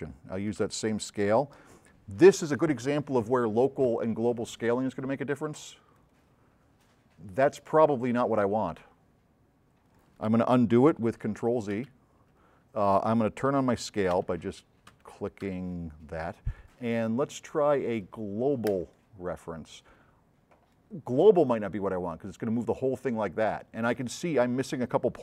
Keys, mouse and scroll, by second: 0.0 c, 0.6 x, 6.1 click, 11.8 x, 14.3 v, 14.9 c, 15.5 x, 21.5-23.7 drag.